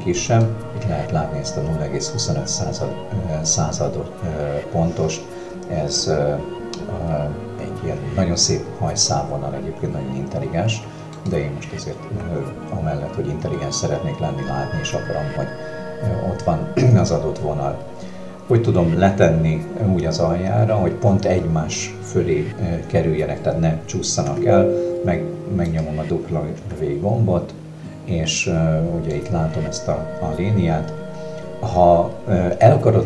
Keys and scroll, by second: 24.3 w.